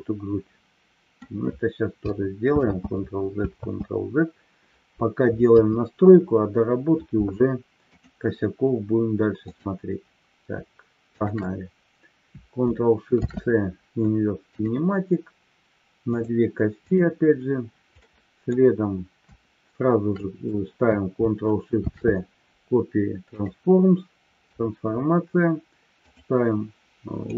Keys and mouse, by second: 3.0 ctrl+z, 5.5 KP_3, 7.9 click, 9.4 click, 11.0-11.8 shift+drag, 13.1 ctrl+shift+c, 16.8 click, 18.0-18.5 middle drag, 21.6 ctrl+shift+c, 26.0-27.3 drag.